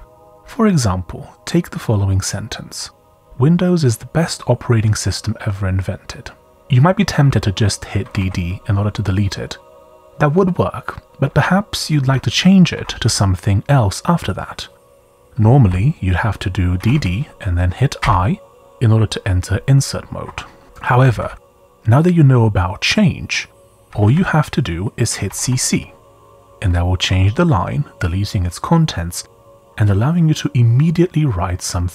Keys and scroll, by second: 2.9 typing, 6.6 typing, 8.0 typing, 12.7 typing, 16.8 typing, 18.0 typing, 20.2-21.9 typing, 23.5-24.0 typing, 25.2 typing.